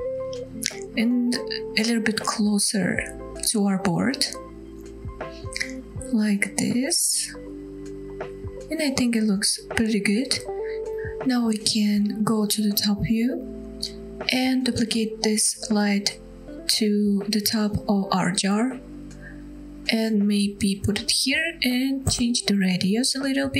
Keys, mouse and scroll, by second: 0.2 middle click, 0.8 g, 7.3 click, 7.8 scroll down 1, 8.1-8.4 middle drag, 8.6 drag, 8.8-10.1 scroll down 2, 9.0-10.1 middle drag, 10.3-10.8 middle drag, 10.9 scroll up 1, 11.4-11.7 scroll down 1, 11.8-12.3 middle drag, 12.4-13.1 scroll up 4, 13.1-13.4 middle drag, 14.0 KP_7, 15.6 shift+d, 20.4 click, 21.9-23.5 drag.